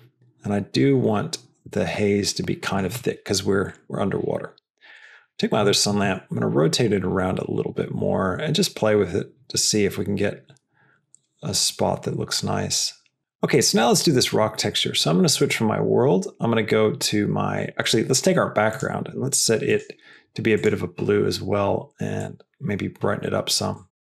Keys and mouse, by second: 4.8 click, 5.6 r, 15.4-17.5 drag, 18.6 click.